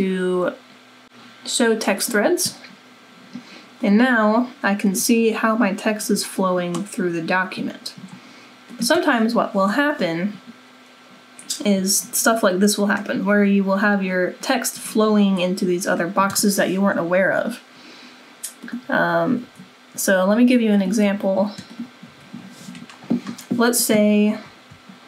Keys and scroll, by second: 19.4 Delete, 21.1 Delete, 22.0 Delete.